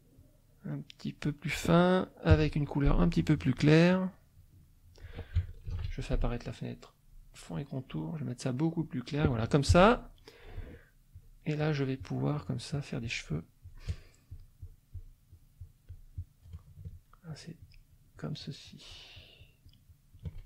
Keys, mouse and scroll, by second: 0.1-1.6 drag, 2.3 F7, 2.4 click, 3.9 click, 5.7 ctrl+shift+f, 7.1-9.2 drag, 9.7 F6, 9.8 click, 11.1 shift+click, 11.6 shift+click, 12.0 shift+click, 12.4 shift+click, 12.7 shift+click, 13.8 shift+click, 14.3 shift+click, 14.9 shift+click, 15.3 shift+click, 15.6 shift+click, 17.3-20.4 shift+drag.